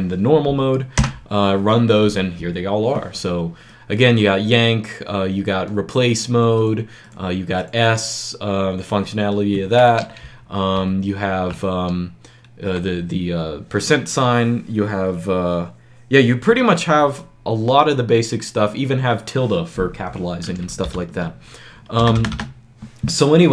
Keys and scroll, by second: 0.9 Return, 10.6 shift+Page_Up, 20.8 ctrl+l, 21.9 BackSpace, 22.1 BackSpace, 22.2 BackSpace.